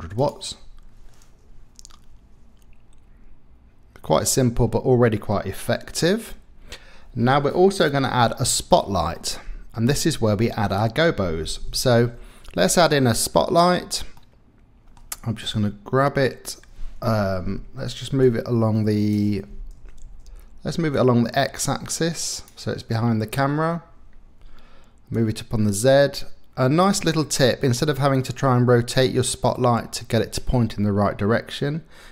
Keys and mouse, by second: 1.6 KP_0, 9.1 middle click, 9.5 click, 10.8 middle click, 11.9 shift+a, 14.3 click, 15.4 g, 17.0 Escape, 18.2-19.3 drag, 20.3 ctrl+z, 20.9-22.5 drag, 25.2-26.8 drag, 27.8-29.2 middle drag.